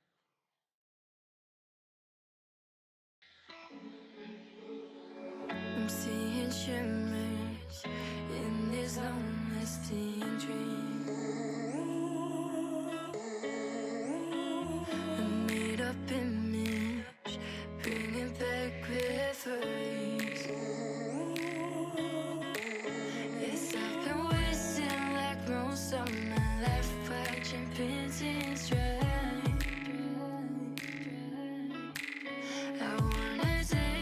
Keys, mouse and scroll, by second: 0.9 Tab, 3.5-3.9 middle drag, 4.5-5.1 middle drag, 5.4-6.1 drag, 10.1-11.4 middle drag, 11.4-12.9 drag, 13.1-14.9 middle drag, 24.7 click, 25.5-26.0 drag, 27.6-29.8 drag.